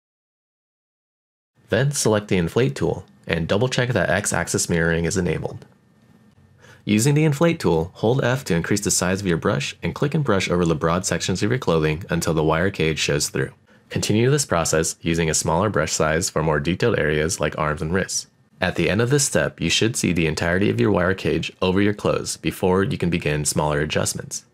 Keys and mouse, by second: 4.0 click, 6.1 f, 7.2 click, 7.6 f, 9.0 click, 9.5 middle click, 9.6 click, 10.1 shift+middle click, 10.2 middle click, 10.5-11.7 drag, 11.7 middle click, 12.0 click, 12.2 middle click, 13.7 click, 13.9 shift+middle click, 14.2 click, 14.7 shift+f, 14.8 shift+f, 16.3 f, 16.7 click, 17.2 click, 17.5 middle click, 17.9 f, 17.9 click, 18.5 click, 18.9 click, 19.2 middle click, 20.3 middle click, 20.5 click, 21.9 f, 21.9 click, 21.9 f, 23.3 click, 23.8 shift+middle click, 24.0 middle click.